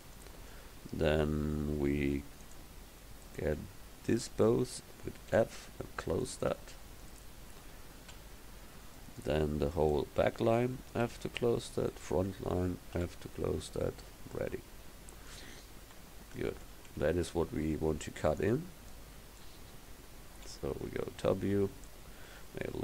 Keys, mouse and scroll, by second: 2.5 click, 5.4 f, 8.2 f, 9.8-11.1 right drag, 11.1 f, 13.0 f, 13.8 Tab, 15.9 KP_1, 20.4 KP_7, 22.4 s.